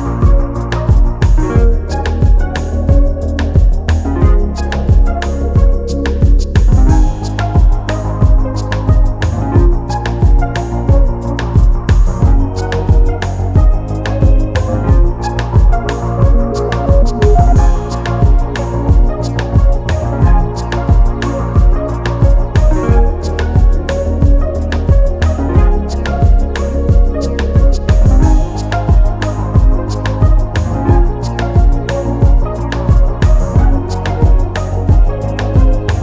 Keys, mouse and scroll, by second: 1.7 click, 3.9 click, 4.3-4.8 scroll down 1, 4.8 click, 10.8 scroll up 1, 12.8 click, 15.8 scroll down 1, 17.3 click, 20.6-21.0 scroll down 1, 21.2 click, 22.1 scroll up 1, 22.6 click, 29.0 scroll down 1, 29.5 scroll up 1, 29.8 click, 31.1-32.1 scroll up 1, 32.2 click, 34.4 click.